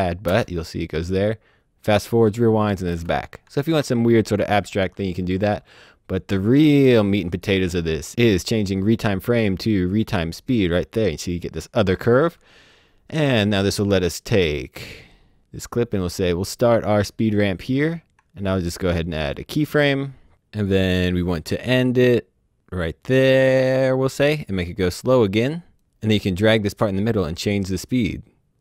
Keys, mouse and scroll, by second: 0.2 space, 2.8 space, 3.5 z, 5.3 click, 5.5 Delete, 6.3 click, 6.9 Delete, 7.3 click, 8.2 click, 13.3 click, 17.8 ctrl+click, 19.2 click, 20.2 click, 25.4 click, 26.7 click.